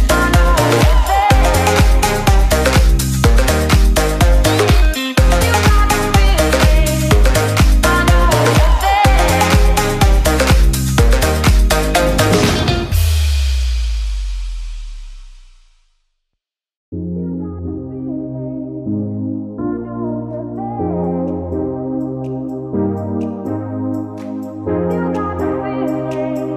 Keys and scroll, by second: 5.5 ctrl+space, 6.5 ctrl+g, 6.9 ctrl+space, 11.0 ctrl+g, 11.2 ctrl+space, 11.6 ctrl+shift+i, 12.0 ctrl+space, 14.2 ctrl+space, 15.7 ctrl+;, 16.0 ctrl+space.